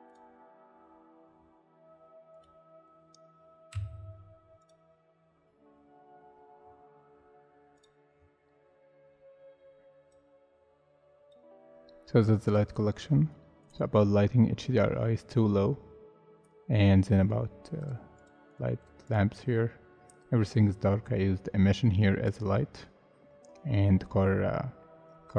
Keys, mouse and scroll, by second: 3.7 m, 6.1 scroll down 1, 9.0 scroll up 1, 16.8 scroll down 1, 18.2 double click, 24.8 middle click.